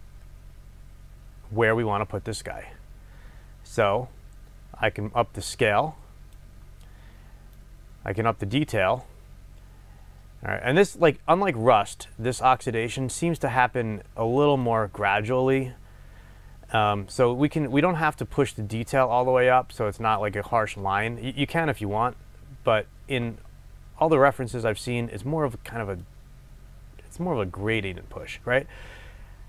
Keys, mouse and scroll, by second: 2.7-3.9 scroll up 2, 3.9-29.4 drag.